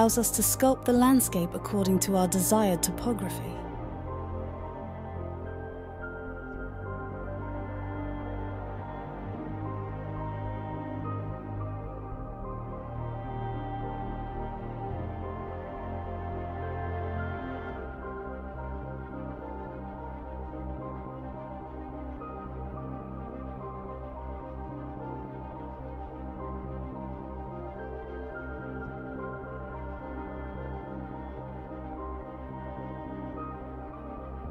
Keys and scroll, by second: 5.0-6.9 typing, 33.8-34.5 typing.